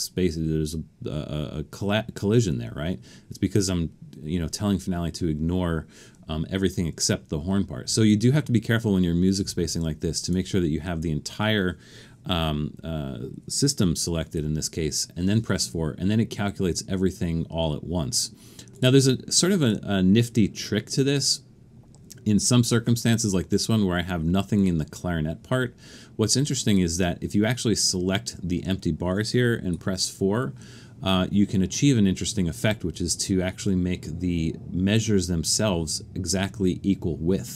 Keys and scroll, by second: 14.4 4, 29.7 4.